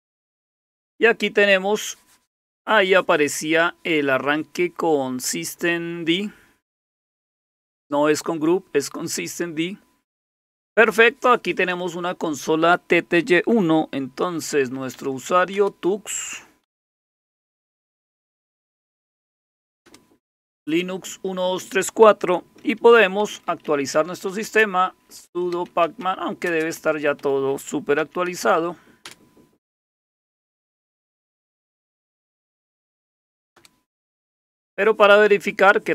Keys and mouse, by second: 1.6 Down, 1.7 Down, 1.8 Down, 14.2-19.5 typing, 19.8 Return, 23.0-29.0 typing, 30.3-33.5 typing.